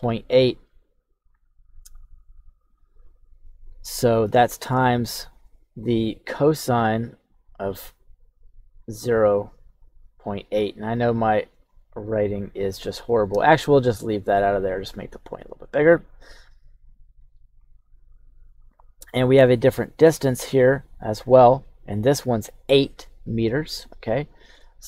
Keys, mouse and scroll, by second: 4.3 shift+middle click, 6.1 click, 7.3 click, 7.9 click, 9.2-10.2 drag, 10.5 click, 11.3 ctrl+z, 11.5 ctrl+z, 12.0-13.1 drag, 13.3 ctrl+z, 14.1-15.5 drag, 16.8 click, 19.7 click, 20.9 click, 24.3 click.